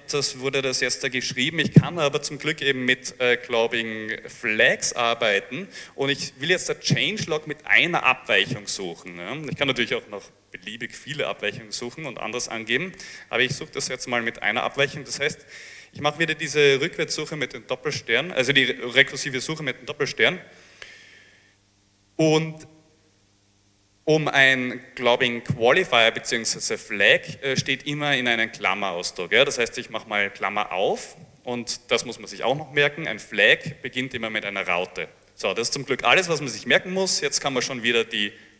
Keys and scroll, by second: 12.2 Up, 13.4 BackSpace, 14.0 BackSpace, 29.7 shift+8.